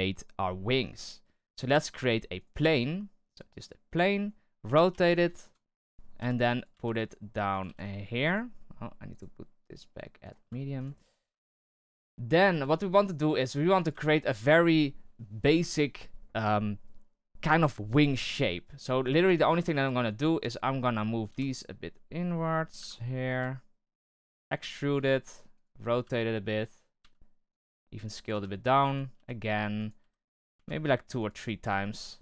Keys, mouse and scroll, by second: 2.3 right click, 2.6 shift+a, 4.6 r, 6.1 g, 9.0-10.5 drag, 10.5-10.8 shift+middle drag, 10.8-11.3 scroll up 2, 11.3-11.7 shift+middle drag, 11.7 s, 12.4 g, 18.6-18.9 scroll up 1, 18.9 scroll down 1, 19.2 Tab, 19.6 right click, 21.2 g, 24.2 e, 24.9 r, 26.0-29.9 typing, 31.9 r.